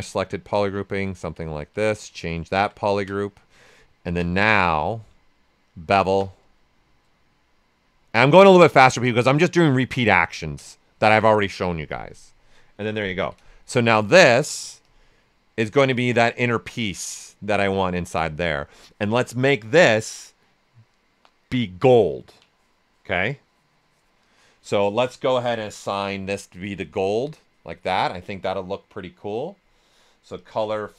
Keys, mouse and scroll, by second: 0.0-4.1 drag, 4.1 space, 5.1 space, 6.8 click, 8.0 right click, 9.0-10.6 drag, 10.6 right click, 11.9 click, 13.2 d, 13.5 shift+f, 13.9 ctrl+right click, 14.8 click, 15.7-25.4 ctrl+right drag, 25.4 click, 26.5 click, 30.3 click.